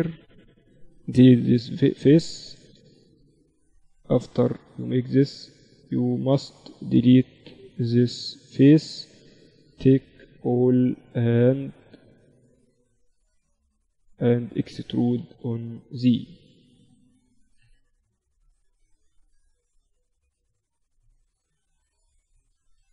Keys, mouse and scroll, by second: 0.1-2.1 drag, 0.4-3.1 right drag, 1.3 x, 3.1 ctrl+r, 4.9 a, 5.1-8.9 right drag, 6.1-8.0 drag, 7.8 x, 9.0 middle click, 10.2 KP_1, 11.1 a, 11.5 a, 11.9 a, 12.3-14.3 drag, 14.8 e, 18.7-22.8 middle drag, 21.4 z, 22.8 KP_Divide.